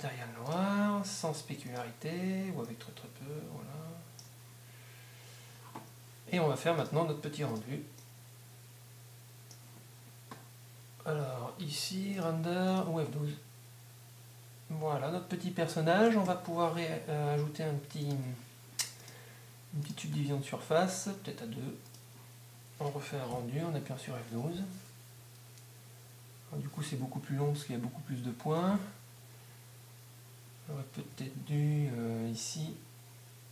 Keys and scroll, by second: 3.2 Up, 23.3 F12, 31.1 Escape.